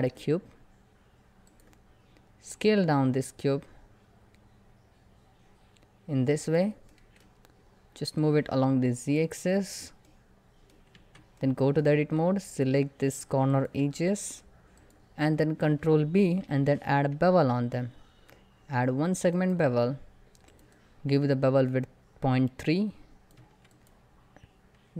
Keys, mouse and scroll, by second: 1.7 scroll down 1, 2.5 s, 6.1 click, 6.5 shift+middle click, 7.8-9.2 drag, 9.2 shift+middle click, 9.5 scroll up 1, 9.7 middle click, 10.6 Tab, 14.7 click, 15.1 scroll up 1, 16.1 ctrl+b, 17.6-18.7 shift+scroll down 2, 18.7-19.1 shift+scroll down 1, 19.1 shift+click, 24.3 click.